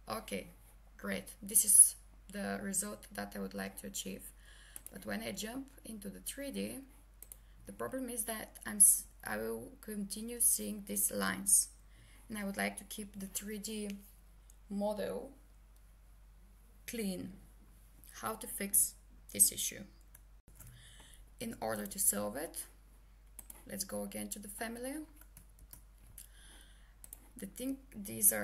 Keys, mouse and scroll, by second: 8.8 click, 20.4 ctrl+Return, 21.8 click, 25.6 ctrl+h, 27.0 click.